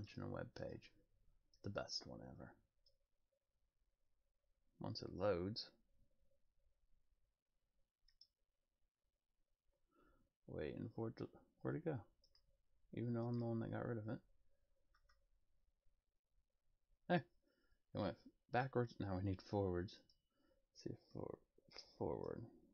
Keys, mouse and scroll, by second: 0.0 click, 0.6 click, 1.5 click, 8.1 click, 12.2 click, 13.2 click, 20.0 click.